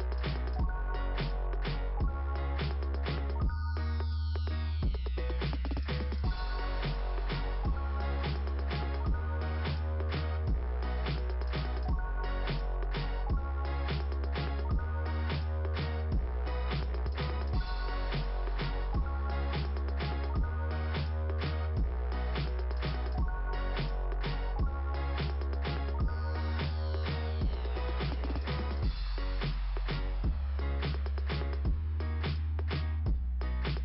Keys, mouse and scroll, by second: 1.5 click, 13.1 click, 13.8 click, 18.4 click, 26.7 click, 28.8 middle click, 29.1-30.7 typing, 29.2 middle click, 31.6 click.